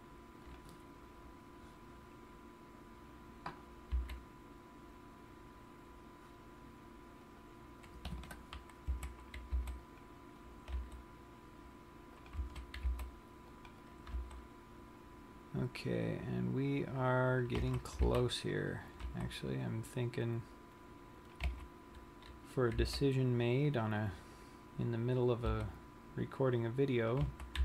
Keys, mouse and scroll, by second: 1.1 click, 1.3 scroll down 1, 2.9-4.4 scroll up 2, 4.5 c, 7.9 right click, 8.7 Escape, 9.5 a, 10.2 c, 11.1 right click, 11.3 g, 12.9 click, 12.9 a, 13.5 c, 14.7 g, 17.8 click, 18.1 a, 18.5 c, 19.7 right click, 19.8 g, 21.9 click, 22.2 a, 23.6 c, 24.8 right click, 26.1 g.